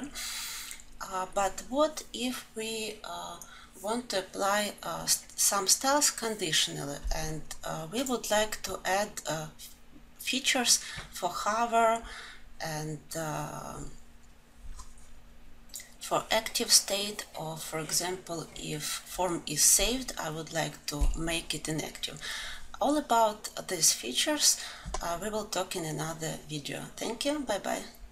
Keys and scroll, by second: 16.6 ctrl+alt+s.